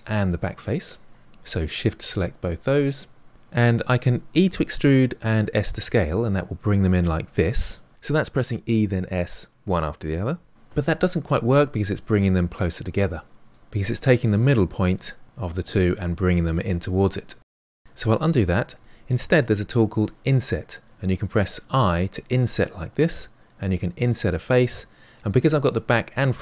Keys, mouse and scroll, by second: 1.6 shift+click, 2.2-3.3 middle drag, 4.4 e, 9.1-10.5 middle drag, 11.6-13.6 middle drag, 13.8-18.1 middle drag, 18.1 ctrl+z, 19.9 i, 25.7-26.4 middle drag.